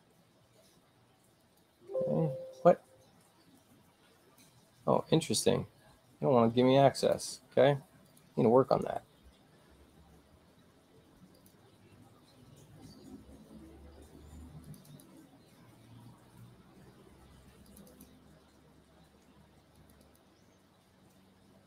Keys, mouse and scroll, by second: 1.4 click, 3.6 click, 7.0 click, 8.1 click, 9.4 scroll down 2, 9.9 middle click, 10.3 middle click, 10.7 middle click, 11.4 click, 13.4 middle click, 14.7 click, 14.9 click, 17.7 click, 17.9 click, 19.8 click, 20.0 click.